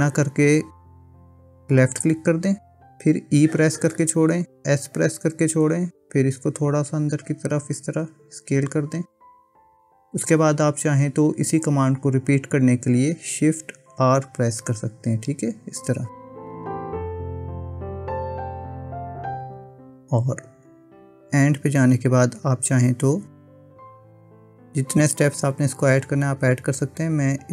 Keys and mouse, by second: 3.7 e, 14.0 shift+r, 15.1-18.3 typing, 21.4 shift+r, 24.5 ctrl+z, 26.2 ctrl+z, 26.6 ctrl+z, 27.1 ctrl+z.